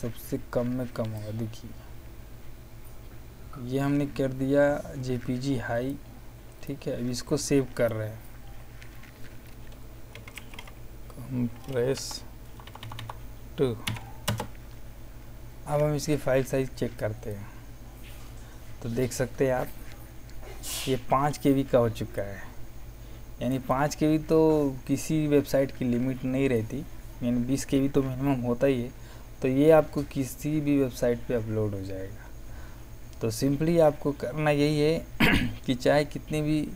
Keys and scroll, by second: 9.8-11.0 typing, 11.9 Down, 12.3 Left, 13.8 KP_2, 14.2 KP_Enter.